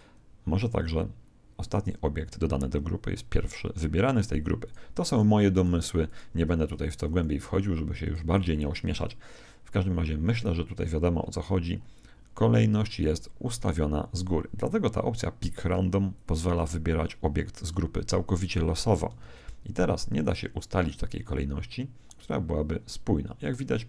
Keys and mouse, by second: 1.6 right click, 4.6-7.9 right drag, 7.3 z, 8.0 right click, 8.3 z, 10.8-13.7 middle drag, 16.1 click, 19.2 alt+a.